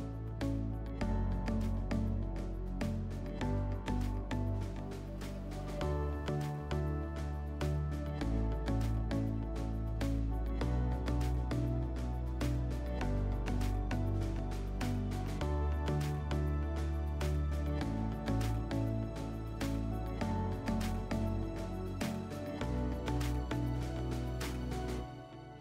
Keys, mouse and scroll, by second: 0.1 click, 1.2 click, 2.2 click, 5.7 click, 18.7 click, 21.2 click, 23.1 click.